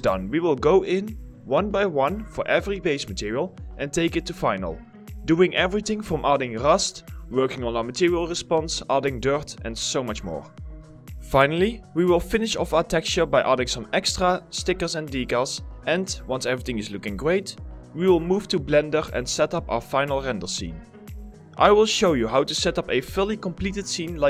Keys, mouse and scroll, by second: 0.0-0.6 typing, 1.6 alt+click, 1.8 alt+click, 1.9 middle click, 2.2 alt+middle click, 3.0 alt+right click, 3.5 alt+click, 4.0 alt+right click, 4.1 alt+click, 4.2 alt+middle click, 4.7 s, 4.7 middle click, 4.7 s, 4.9 alt+middle click, 5.1 s, 5.3 alt+right click, 5.5 alt+middle click, 5.6 alt+click, 5.7 alt+s, 5.8 alt+click, 6.0 right click, 6.3 alt+middle click, 6.4 alt+right click, 6.5 alt+click, 6.5 alt+middle click, 6.6 alt+click, 7.5 alt+click, 8.2 alt+click, 8.8 alt+double click, 9.4 alt+click, 10.1 alt+click, 10.8 double click, 11.4 alt+click, 11.7 alt+click, 12.5 alt+click, 13.3 alt+click, 13.8 alt+click, 14.9 alt+click, 15.6 ctrl+alt+click, 15.8 alt+click, 16.3 ctrl+alt+click, 16.8 alt+click.